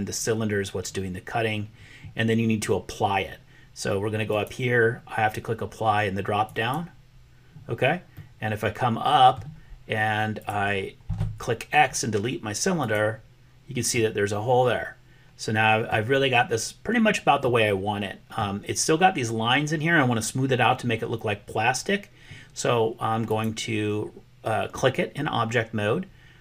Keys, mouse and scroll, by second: 4.3-6.8 drag, 8.2-9.4 middle drag, 10.9 x, 13.9-16.0 middle drag, 17.5 middle click, 23.1 click.